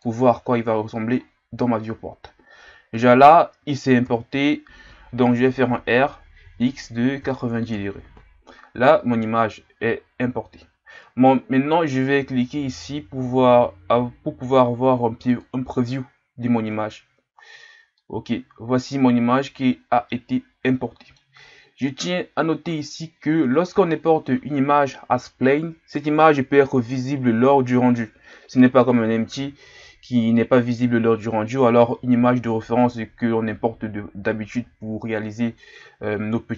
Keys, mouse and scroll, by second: 1.1-1.9 scroll up 14, 4.0 KP_7, 9.7-12.7 scroll down 1, 16.7-17.9 scroll down 1, 17.9-36.5 middle drag.